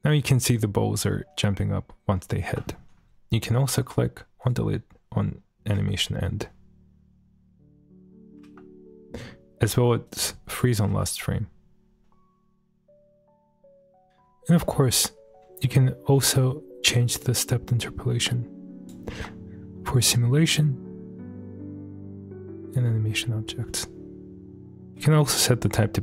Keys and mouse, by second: 1.4 middle click, 3.0 space, 4.5 click, 5.8 space, 10.1 click, 10.1 space, 10.6 click, 10.9 space, 16.1 space, 17.2-18.9 drag, 17.2 space, 19.1 space.